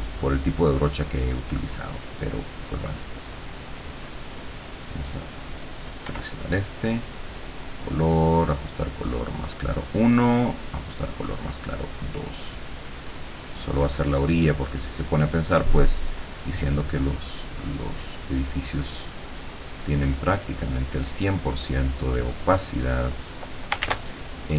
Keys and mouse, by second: 6.1 r, 7.5 click, 9.1 click, 10.1 click, 11.5 click, 12.5-19.1 drag, 19.4-20.7 drag, 21.1 click, 22.8 click, 23.9 ctrl+s.